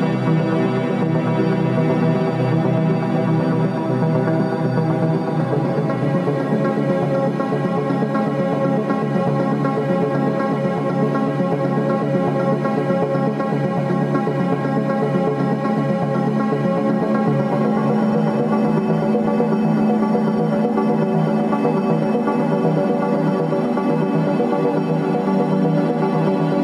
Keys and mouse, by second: 0.0-1.3 drag, 5.6 click, 11.0-12.7 drag, 15.2-18.0 drag, 19.6 click, 21.5-26.6 drag.